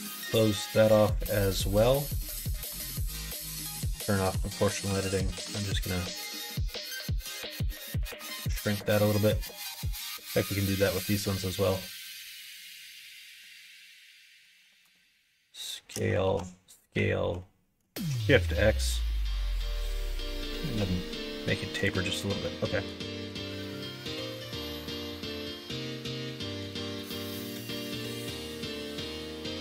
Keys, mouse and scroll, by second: 0.0 ctrl+f, 1.1 middle click, 2.2 middle click, 2.6 s, 3.7 ctrl+z, 4.3 o, 4.8 s, 8.7-9.4 scroll up 2, 8.8 middle click, 9.4 middle click, 9.9 3, 10.3 click, 11.5 click, 13.6 middle click, 14.4 s, 16.2 ctrl+z, 16.9 s, 20.5 s, 22.4 middle click, 23.6 middle click, 24.4 ctrl+z, 25.2 s, 28.0 middle click, 28.4 middle click, 29.0 middle click.